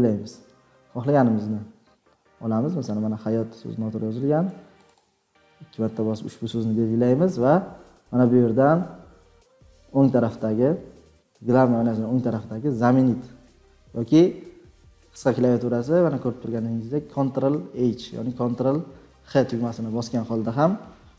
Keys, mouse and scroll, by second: 0.8 scroll, 0.9 scroll up 6, 1.2 scroll, 1.4 scroll up 2, 1.9-2.7 scroll, 4.8-5.4 scroll.